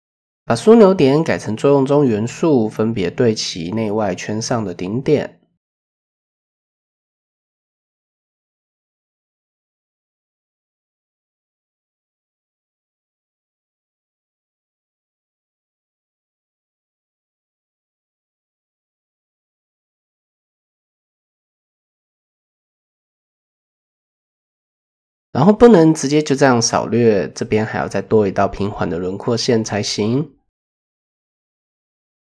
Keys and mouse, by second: 0.4-1.5 drag, 3.4 s, 6.0 click, 7.9 s, 10.7 click, 11.4-12.0 drag, 12.8 click, 13.4 s, 15.0 click, 15.9 s, 18.7 click, 19.4 s, 20.7 click, 21.4 s, 24.4 click, 25.1 KP_1, 26.2 shift+click, 26.9 shift+click, 27.0 typing, 28.0 shift+drag, 29.3 shift+drag, 29.9 click, 31.2 click, 31.8-32.3 drag.